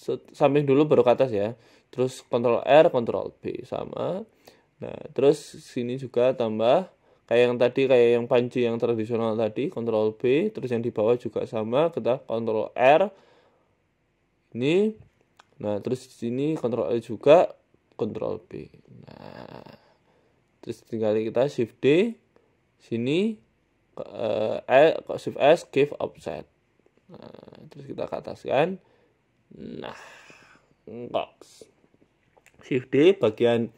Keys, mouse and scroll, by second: 0.5 scroll up 4, 1.0 ctrl+r, 2.1 s, 2.8 ctrl+b, 3.9 Tab, 4.0-4.4 scroll down 5, 4.4 shift+middle click, 4.6 Tab, 4.8 scroll down 1, 5.4 ctrl+r, 7.4 ctrl+r, 8.7 s, 9.9 ctrl+b, 10.8 Tab, 11.2 Tab, 11.7 ctrl+r, 13.1 ctrl+r, 15.4 ctrl+r, 16.9 s, 18.3 ctrl+b, 19.5 Tab, 19.7 scroll down 5, 20.0 shift+middle click, 20.7 scroll down 1, 21.4 right click, 21.4 scroll up 1, 22.7 shift+d, 23.9 right click, 24.5 right click, 24.7 shift+s, 25.6 shift+s, 28.1 g, 28.9 s, 30.8 right click, 31.7 shift+d, 33.5 shift+middle click, 33.7 scroll up 1.